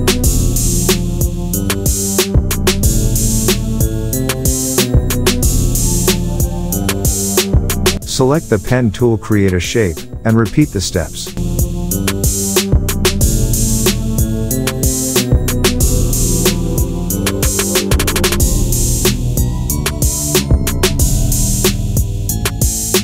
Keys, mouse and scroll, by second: 0.3-0.8 alt+scroll up 2, 0.8 drag, 2.1 click, 2.5-3.0 alt+scroll up 1, 3.0 alt+click, 3.6 alt+scroll down 1, 4.1-4.7 alt+scroll up 1, 4.7 alt+click, 5.0-6.1 alt+scroll down 1, 6.1 click, 6.5 space, 6.9-7.3 click, 6.9 space, 7.1 click, 8.2 space, 8.3 click, 8.5 space, 9.8 click, 10.7-11.2 alt+scroll up 1, 11.7 click, 12.3 ctrl+z, 12.8 click, 14.7 click, 15.0 alt+scroll down 1, 16.8 click, 18.4 shift+click, 18.6 space, 18.8-19.3 click, 19.0 space, 20.5 shift+click, 20.8 click, 21.7 alt+click.